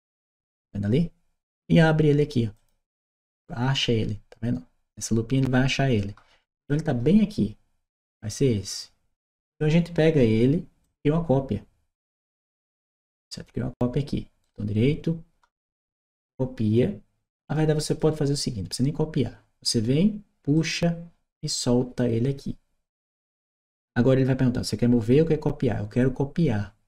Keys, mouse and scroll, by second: 2.4 click, 6.4 click, 10.6-12.7 drag, 14.2 right click, 17.7 click, 20.4-23.2 drag.